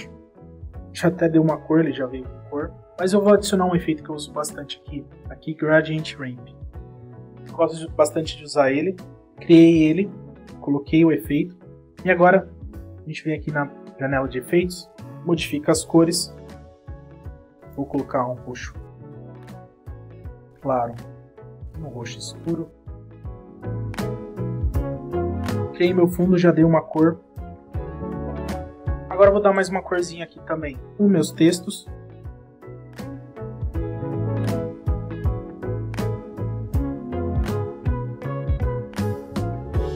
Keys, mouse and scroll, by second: 1.0 space, 4.4 space, 5.7 click, 6.6 click, 12.5 click, 16.2 click, 17.1 click, 17.8 click, 19.6 click, 19.8 click, 21.1 click, 22.1 click, 22.9 click, 24.0 click, 24.1 click, 24.5 click, 24.6 click, 25.0 scroll down 1, 25.0 click, 26.5 click, 27.1 space, 30.0 click, 30.2 click, 30.3 click, 30.8 scroll down 1, 31.0 click, 31.7-33.9 typing, 31.9 click, 32.3 click, 32.8 double click, 33.0 click, 33.1 scroll down 2, 33.6 click, 36.9 click, 38.2 space.